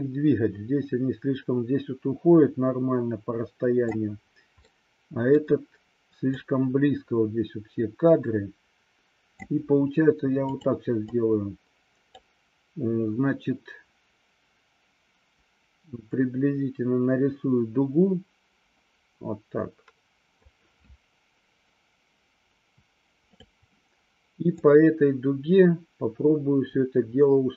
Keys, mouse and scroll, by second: 4.7-5.5 middle drag, 6.5-9.5 drag, 10.5 click, 11.1-12.3 drag, 16.1-20.6 drag, 23.3 click, 24.6-27.5 drag.